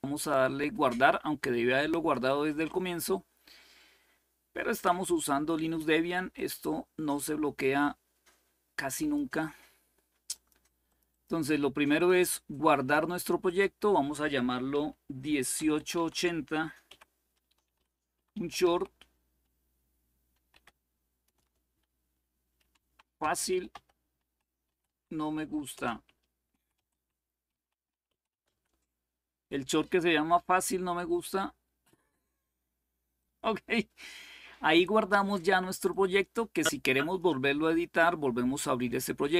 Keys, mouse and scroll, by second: 0.0 click, 1.6-4.3 drag, 6.0-9.7 drag, 10.0 click, 10.6 click, 10.9 click, 11.7-12.7 drag, 13.1 click, 15.2-18.3 typing, 20.0-21.1 typing, 22.3-28.2 typing, 32.9 click.